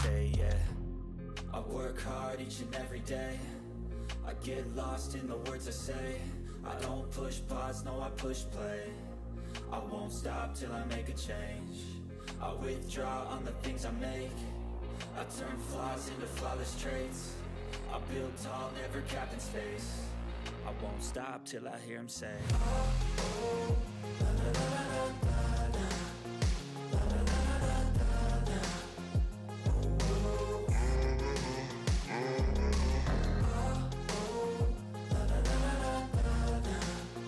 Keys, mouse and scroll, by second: 1.6 ctrl+s, 2.0-14.0 drag, 14.6 ctrl+v, 15.3 click, 16.1-17.5 typing, 19.1 click, 22.4 scroll down 1, 23.4 click, 25.2 click, 25.2 right click, 25.7 click, 25.8-28.5 typing, 29.2 click, 30.4 right click, 31.0 click, 31.4-33.3 typing, 33.8 click, 34.6 right click, 35.2 click, 35.7-37.2 typing.